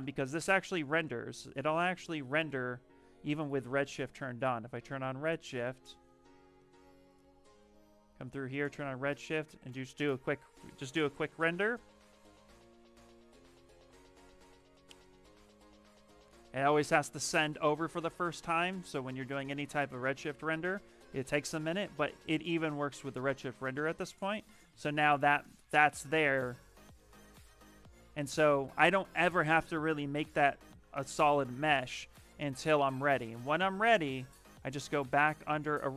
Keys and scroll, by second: 3.0 Escape, 9.5 shift+r, 27.9 shift+f.